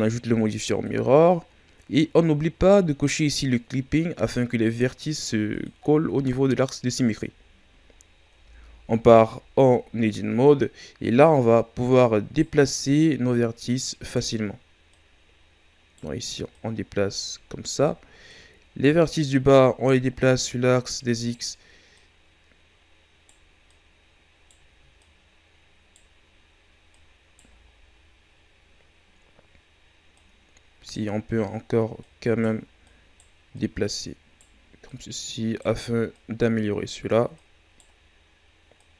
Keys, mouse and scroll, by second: 0.8-1.6 drag, 4.1-7.5 drag, 7.5-7.9 shift+scroll down 1, 7.9 scroll up 2, 8.3 Tab, 9.5-10.1 shift+scroll down 2, 10.1-11.0 scroll up 2, 11.0 right click, 12.9 right click, 14.9 right click, 16.5 right click, 17.5 shift+scroll down 2, 18.3 right click, 20.2 right click, 21.9 right click, 23.7-26.9 right drag, 27.6-28.8 scroll down 4, 28.8-30.2 scroll up 2, 30.2 right click, 31.2 scroll up 1, 32.0 right click, 32.8 right click, 33.5-36.2 right drag, 37.3 right click, 38.7 right click.